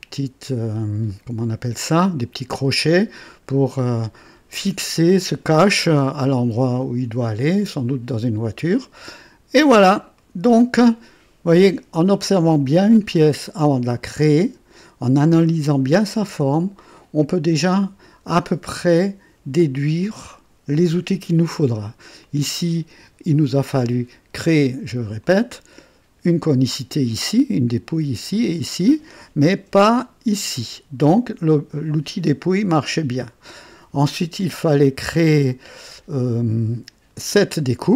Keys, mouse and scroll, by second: 1.0 click, 2.8-3.6 drag, 3.9-4.5 drag, 4.4 typing, 5.4-10.8 drag, 7.9-9.1 typing, 10.1 right click, 12.6-22.0 drag, 12.6-13.3 typing, 22.2-24.1 drag, 25.1 click, 27.0-28.3 drag, 28.7-29.4 drag, 29.6 KP_1, 30.7 typing, 31.1-31.8 drag, 32.7-33.6 drag, 34.3-36.3 drag, 36.0-36.8 typing.